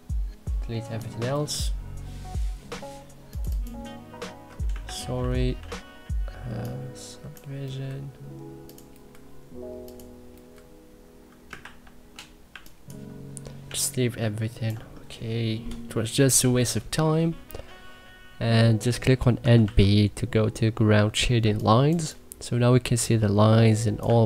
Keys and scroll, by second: 1.3 Delete, 4.6 ctrl+z, 7.7 Delete, 11.4 ctrl+z, 12.3 1, 13.4 3, 19.0-19.9 typing, 21.2 1, 21.8 3.